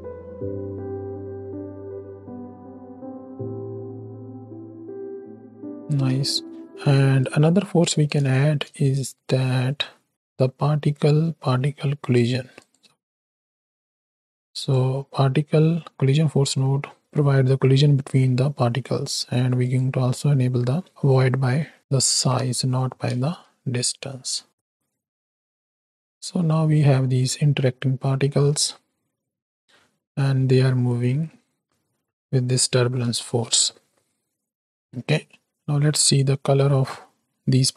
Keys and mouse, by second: 6.0 space, 6.4 click, 7.4 click, 8.3 shift+a, 14.1 click, 16.3 click, 17.3 click, 19.6 click, 21.7 drag, 22.1 shift+Right, 22.5 shift+Left, 23.1 space, 24.1 click, 33.3 space, 34.5 click, 35.8-36.4 middle drag, 36.9 middle click, 37.6 middle click.